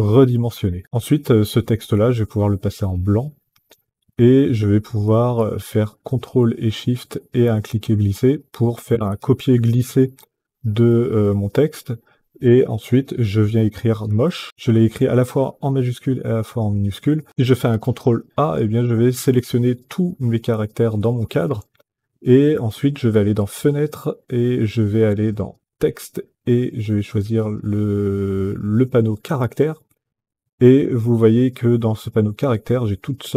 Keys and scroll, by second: 13.8-14.8 typing.